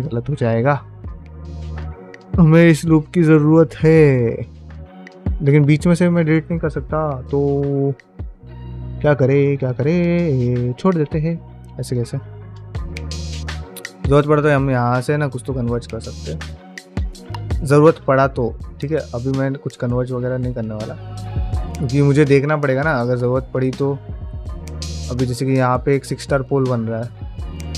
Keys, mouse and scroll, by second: 6.4-12.7 middle drag, 6.4-7.6 scroll down 2, 12.9-15.6 shift+middle drag, 20.1 shift+middle click, 24.4 shift+middle click, 25.3 1, 25.4 click, 25.7-27.7 middle drag.